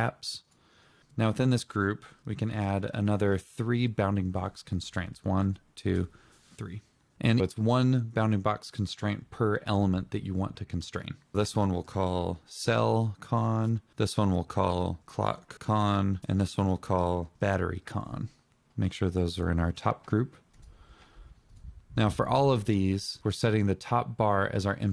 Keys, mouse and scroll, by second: 0.0 ctrl+., 0.9-2.4 typing, 3.3 Return, 4.4 Return, 10.4 Return, 13.2 Return, 14.0-15.0 typing, 15.6 Return, 16.3 typing, 16.4 Return, 17.7 click.